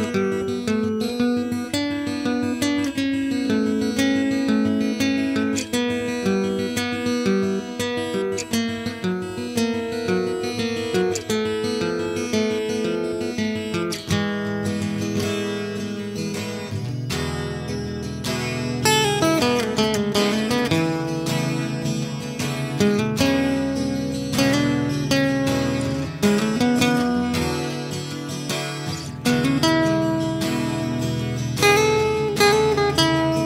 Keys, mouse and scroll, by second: 0.0 middle click, 0.9 Delete, 0.9-1.3 drag, 1.4 Tab, 1.6 a, 1.8 ctrl+r, 1.9 drag, 2.2 z, 2.5 a, 3.4 b, 4.0 Delete, 4.6 Tab, 6.9 drag, 7.1 middle click, 8.1 click, 8.9 Tab, 9.3 b, 10.1-10.9 drag, 11.1 a, 11.1 z, 11.2 Tab, 11.6 a, 12.8 a, 13.7 shift+s, 13.9 shift+a, 14.6-15.7 drag, 14.9 s, 15.9 ctrl+KP_Subtract, 16.1 a, 16.7 s, 17.5-18.0 drag, 19.2-20.2 drag, 19.3 s, 22.0 s, 31.2 space, 31.9 ctrl+a, 32.3 click.